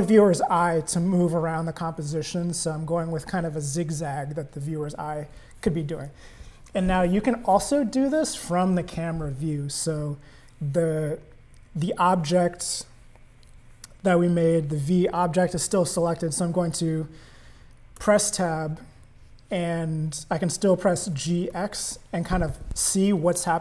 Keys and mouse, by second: 18.1 Tab, 21.0 g.